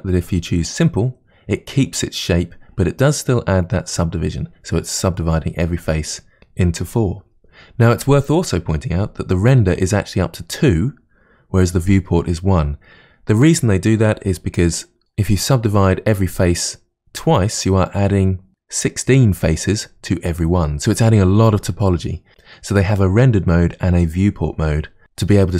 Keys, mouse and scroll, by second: 0.7 click.